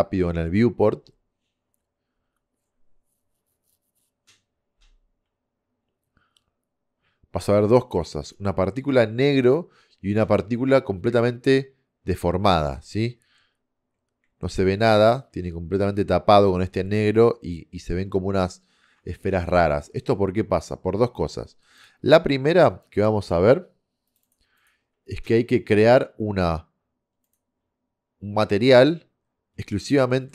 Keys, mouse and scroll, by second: 19.7-20.4 middle drag, 21.8 click, 29.4-29.9 scroll down 1, 29.9 middle click.